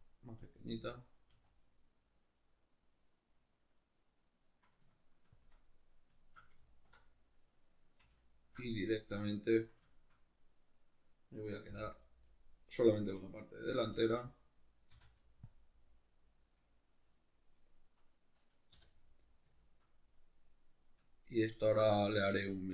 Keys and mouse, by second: 0.0 click, 0.4 s, 1.0 click, 1.3 s, 5.4 shift+click, 5.6-6.7 middle drag, 6.7 alt+right click, 7.1-8.4 middle drag, 8.4 alt+shift+right click, 8.7-12.2 middle drag, 11.7 v, 12.2 right click, 12.3 middle click, 12.8 right click, 13.3 right click, 13.8 l, 16.1 right click, 16.6-18.0 middle drag, 18.0 right click, 18.8 l, 19.0-22.7 middle drag.